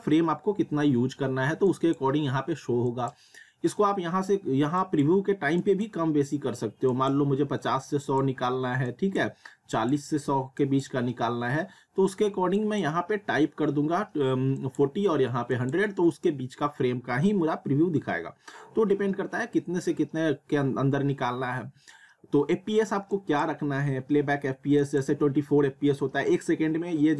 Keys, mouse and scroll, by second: 1.7 click, 23.1 click.